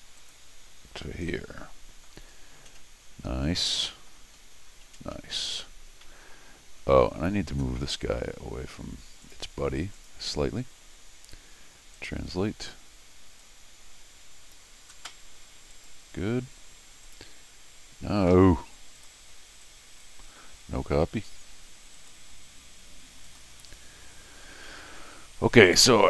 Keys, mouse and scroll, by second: 0.2 click, 1.3 middle click, 3.3 scroll down 1, 3.7 middle click, 4.4 scroll up 1, 6.0-6.3 scroll down 1, 6.7-9.2 scroll up 1, 9.2 click, 9.9 click, 11.9 click, 13.4-14.5 drag, 15.7 click, 17.0 click, 18.3 Escape, 19.0 click, 19.6 click, 21.9 click, 23.2 click, 23.7 click, 24.6 middle click.